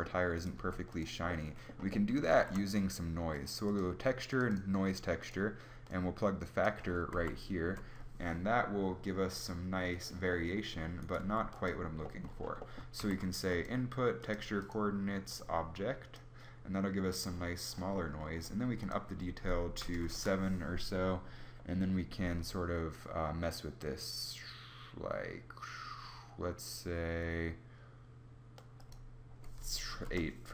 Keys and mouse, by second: 0.4 g, 1.9 middle click, 2.2 shift+a, 7.2 shift+z, 10.9 g, 12.8 shift+a.